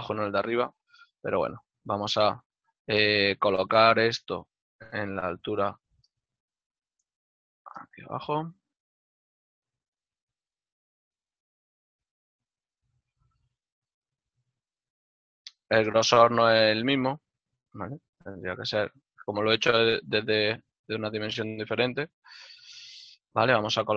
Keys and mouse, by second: 0.0 middle click, 3.1 shift+middle click, 5.5 g, 8.3 middle click, 15.6 z.